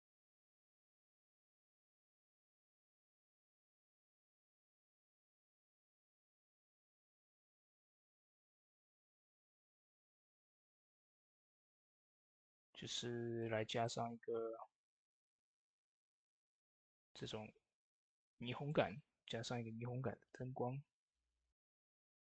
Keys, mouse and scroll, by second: 5.1 shift+d, 7.8-16.0 drag, 16.3-22.2 drag.